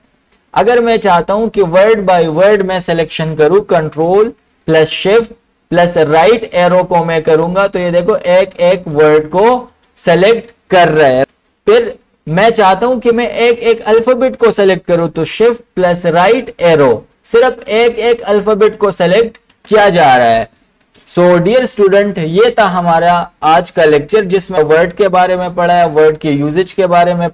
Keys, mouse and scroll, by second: 0.3 Home, 3.6 Home, 6.4 ctrl+shift+Right, 11.4 Home, 15.0 shift+Num_Lock, 15.9 Right.